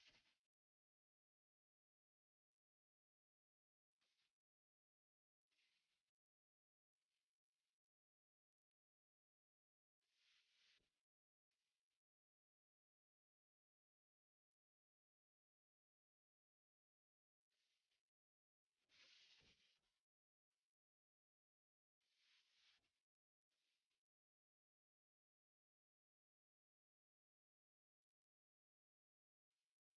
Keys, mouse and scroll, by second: 0.5-1.6 typing, 2.1 F10, 2.5 right click, 4.4-5.8 typing, 6.5 Return, 7.1-9.4 typing, 9.6 Return, 10.3 right click, 11.6-12.8 drag, 12.2-13.8 typing, 13.8 click, 14.1 Return, 15.0 click, 16.5 right click, 17.2 click, 17.2 F10, 17.5 click, 21.6 shift+h, 22.3 Escape, 23.0 click, 24.6 typing, 24.9 Return, 26.2 click, 27.0 typing, 27.6 Tab.